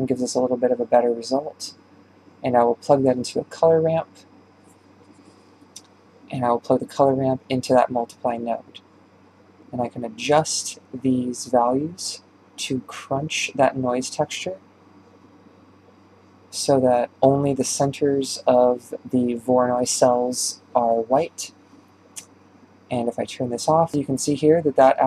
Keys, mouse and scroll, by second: 1.8-3.5 drag, 8.9 ctrl+shift+click, 9.2 middle click, 10.1-10.6 scroll up 1, 11.2 click, 11.6-12.0 scroll up 5, 12.0-14.4 middle drag, 14.4-20.7 drag, 21.1 middle click, 21.3 scroll down 2, 22.9-23.9 scroll down 1, 23.9 Right, 24.0-24.6 middle drag, 24.6 scroll up 5, 24.8 shift+middle click.